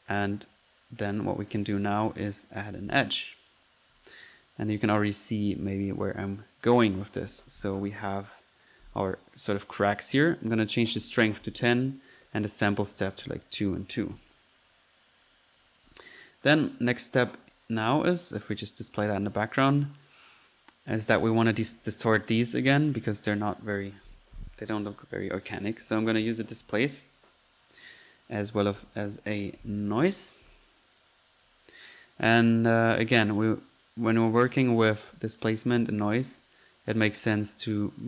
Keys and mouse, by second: 0.0-0.6 typing, 0.8 middle click, 1.2-1.6 drag, 2.0 right drag, 2.4 click, 2.5-3.2 typing, 3.5 click, 4.7 click, 10.7 click, 14.3 middle click, 15.7 click, 19.2-19.8 drag, 23.1-23.9 drag, 23.6 right click, 25.6-26.4 typing, 27.2 click, 27.6 click, 28.3 middle click, 28.5-30.5 typing, 31.0-31.6 drag, 33.0-33.8 drag, 33.8 click, 37.8-38.0 drag.